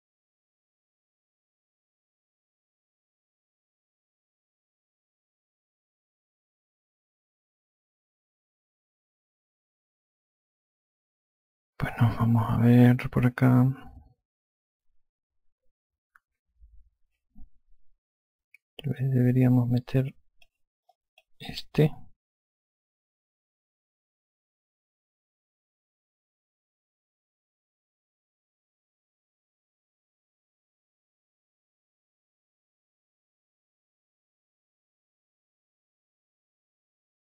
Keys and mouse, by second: 0.2 alt+click, 21.7 click, 22.6 alt+click, 24.3 click, 26.6 alt+click, 30.5 F2, 32.8 click, 36.5 click.